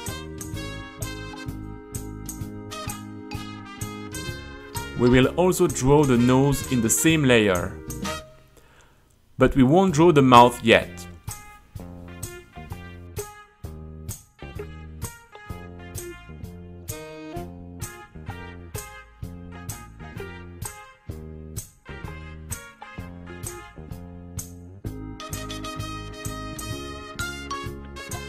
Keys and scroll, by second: 0.6 c, 0.8 Return, 0.9 g, 2.6 w, 2.9 KP_5, 2.9 Return, 4.3-10.3 typing, 11.4 a, 11.7 space, 12.9 Return, 13.1 u, 13.9 space, 14.6 q, 15.2 u, 16.2 space, 16.4 Return, 16.9 h, 17.6 super+r, 20.6-27.7 typing, 24.0 Return, 27.4 Return.